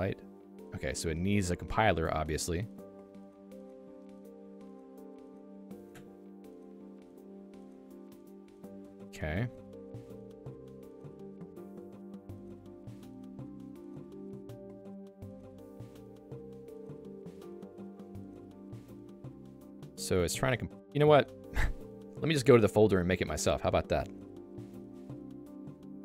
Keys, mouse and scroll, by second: 0.9 j, 2.1 k, 3.6 h, 6.2 h, 7.1 k, 9.1-9.9 typing, 12.7 ctrl+g.